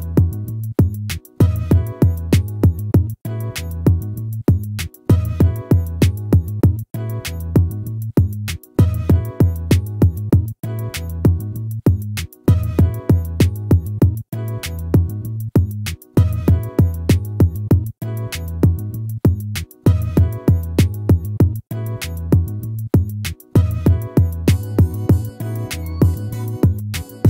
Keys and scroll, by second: 1.9 ctrl++, 4.2 ctrl+-.